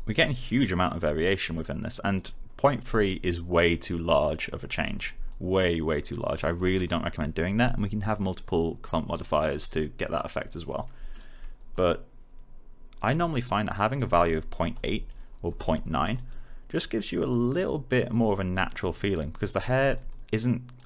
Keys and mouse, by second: 11.7 click, 14.7 8, 15.4 Return, 16.1 click.